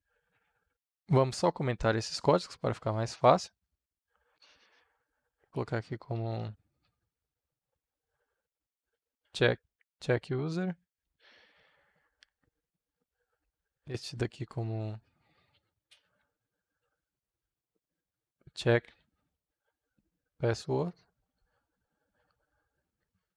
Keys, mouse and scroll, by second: 0.7 Return, 1.1-2.1 drag, 2.1 Tab, 3.0 Return, 4.5-9.8 typing, 12.1 click, 13.0 Tab, 13.5 Return, 15.5-19.8 typing, 20.0 Return, 21.2-22.3 drag, 22.3 Tab.